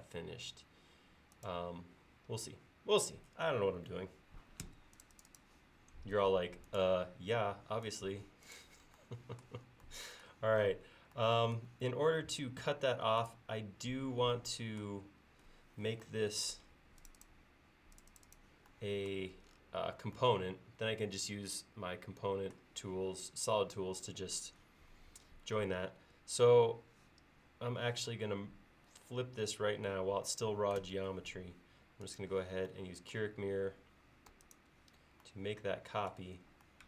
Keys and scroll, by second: 4.7 space, 30.8 ctrl+s.